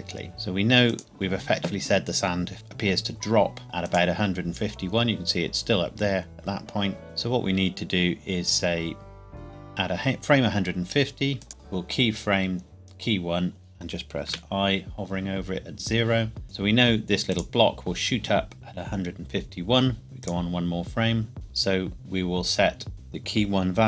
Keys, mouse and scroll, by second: 0.9 click, 3.6 click, 11.4 click, 14.3 i, 16.7 click, 20.2 click, 22.9 click.